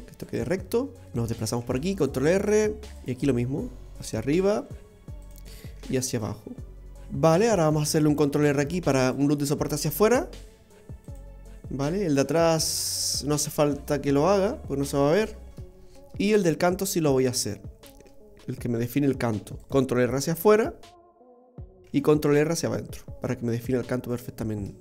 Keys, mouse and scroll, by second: 0.5-1.0 scroll down 1, 1.0 middle click, 1.0 scroll down 2, 1.2 shift+middle click, 1.6 ctrl+r, 2.9 ctrl+r, 5.7 ctrl+r, 6.9 shift+middle click, 6.9-7.7 scroll up 1, 8.5 ctrl+r, 13.2 middle click, 15.5-16.2 scroll up 2, 16.3 middle click, 17.1-17.5 scroll up 2, 17.5 shift+middle click, 19.2 ctrl+r, 22.1 ctrl+r, 24.4-24.8 scroll down 1.